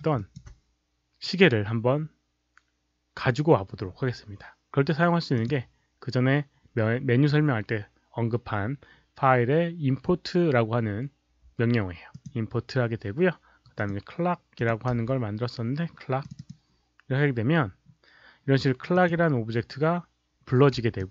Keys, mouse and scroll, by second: 0.1 alt+click, 5.3 click, 12.1 click, 13.7 click, 14.5 click, 14.9 c, 16.2 click, 16.3 click, 16.4 c, 18.9 click, 20.9-21.1 alt+drag.